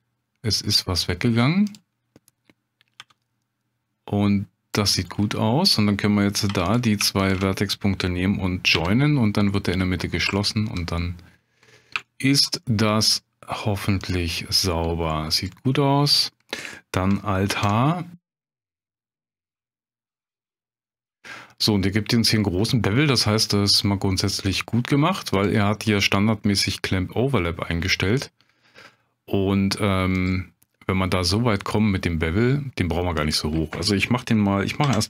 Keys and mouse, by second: 1.7 click, 3.0 g, 6.5 1, 6.7 click, 7.3 shift+click, 8.7 j, 9.6 click, 10.4 shift+click, 11.0 middle click, 12.1 shift+click, 12.6 middle click, 15.6 middle click, 17.5 alt+h, 18.5 Tab, 18.8 middle drag, 19.7 shift+middle drag, 20.4 ctrl+space, 25.3 click, 30.1 click, 33.2-35.0 drag.